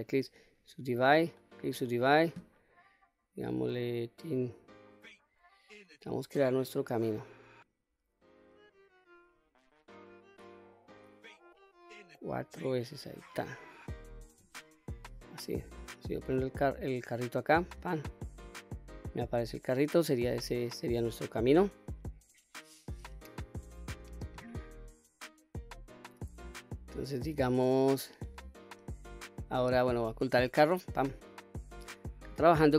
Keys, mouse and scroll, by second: 1.0-2.4 right drag, 3.4-13.1 drag, 15.9 click, 16.9 click, 17.5 click, 25.1-26.2 scroll up 1, 26.2-26.8 scroll down 1, 26.8-27.2 scroll up 1, 27.2 scroll down 1, 30.6 click.